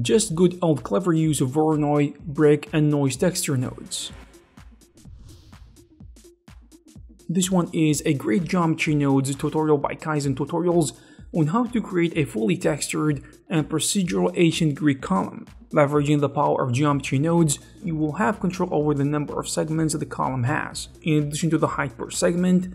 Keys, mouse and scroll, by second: 0.0 middle click, 0.3-0.9 scroll up 4, 0.4 s, 0.5 click, 0.6 click, 0.9 click, 1.2 scroll down 2, 1.3 shift+middle click, 1.6 click, 1.7 ctrl+j, 2.0 click, 2.2 scroll up 2, 2.3 scroll down 7, 2.4 shift+middle click, 2.5 click, 2.7 scroll up 2, 2.8 click, 2.9 click, 3.2 scroll down 2, 3.7-4.1 scroll down 2, 3.8 click, 3.9 shift+middle click, 4.1 click, 4.2 click, 15.2 click, 15.6 shift+click, 15.6-17.6 typing, 17.0 ctrl+g, 17.6-19.0 middle drag, 18.7 shift+a, 19.0 shift+click, 19.1 shift+m, 19.4 shift+middle click, 19.7 shift+a, 20.2 shift+click, 20.7 ctrl+z, 20.7 shift+middle click, 20.7 shift+space, 21.0 click, 21.1-22.7 middle drag, 21.9 shift+a.